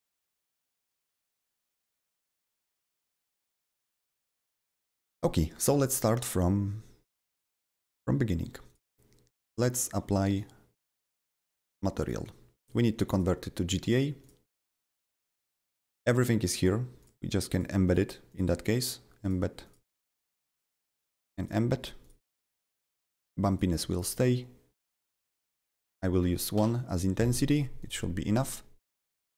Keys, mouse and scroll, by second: 0.2 click, 1.4 click, 1.8 click, 2.6 click, 3.1 click, 8.7 click, 11.2 click, 12.0 click, 13.1 click, 14.2 click, 14.9 click, 17.0 click, 17.5 click, 17.8 click, 18.3 click, 18.7 click, 19.2 click, 19.9 click, 20.4 click, 20.8 click, 21.4 click, 22.0 click, 23.1 click, 23.5 click, 24.1 click, 24.9-29.2 drag, 25.6 1, 26.6 Delete, 29.2 click.